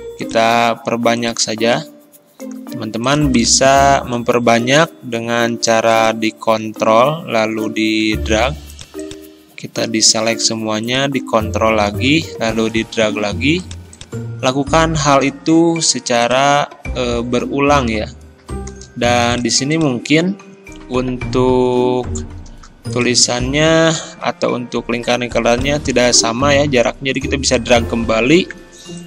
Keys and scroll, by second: 24.0 Delete.